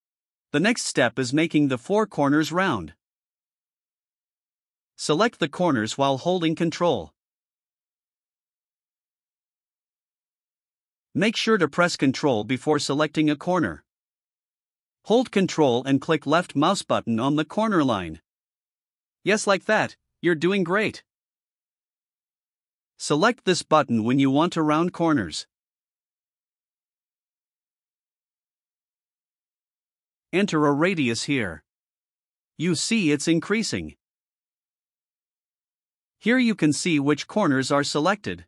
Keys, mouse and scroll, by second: 3.4 click, 4.9 click, 8.5 ctrl+click, 10.2 ctrl+click, 11.7-13.4 drag, 17.4 ctrl+click, 21.2 right click, 28.3 click, 29.3 Return, 31.8 click, 32.1 click, 32.4 click, 32.7 click, 32.9 click, 33.2 click, 33.4 click, 33.7 click, 34.1 click.